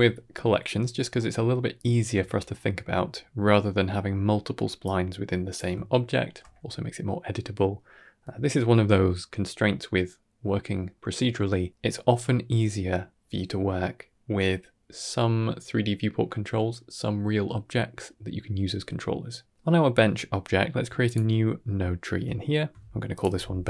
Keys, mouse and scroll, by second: 1.0-1.4 middle drag, 1.6-2.0 scroll up 2, 2.2 shift+middle click, 4.7-5.4 drag, 5.8-6.1 shift+middle drag, 15.4 click, 17.6 click, 20.9 click, 21.6-22.0 middle drag, 22.2 ctrl+middle click, 23.0 shift+click.